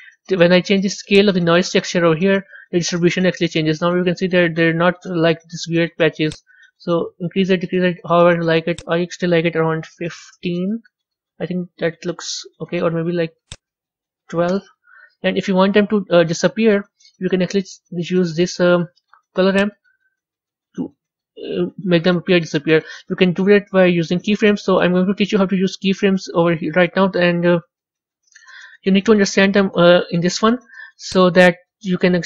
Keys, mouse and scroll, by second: 1.5-11.8 drag, 11.8-14.5 middle drag, 14.5-16.3 drag, 16.3-19.7 middle drag, 19.7-22.4 drag, 31.2-32.2 drag.